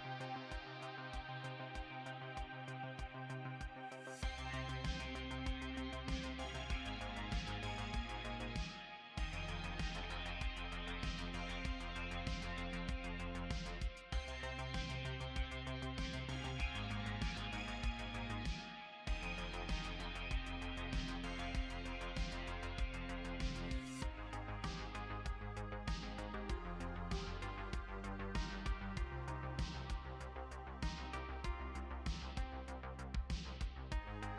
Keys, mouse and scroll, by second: 5.3-6.8 scroll up 6, 6.8 middle click, 8.9 KP_Decimal, 9.7 middle click, 17.3 click, 20.1 shift+click, 23.8 click, 24.8 click, 25.6 click, 26.6-27.2 scroll down 5, 27.2-28.2 scroll up 5, 28.7 click, 30.3 click, 31.7 click.